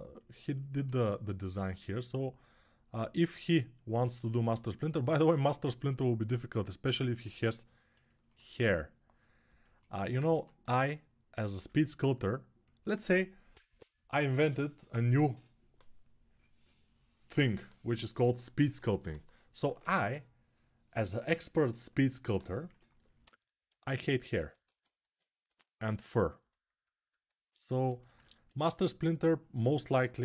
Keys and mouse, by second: 1.4-4.3 ctrl+alt+drag, 4.3-8.0 alt+shift+right drag, 11.3-23.2 alt+drag, 24.4 alt+q, 25.2 g, 27.5-29.6 alt+shift+drag.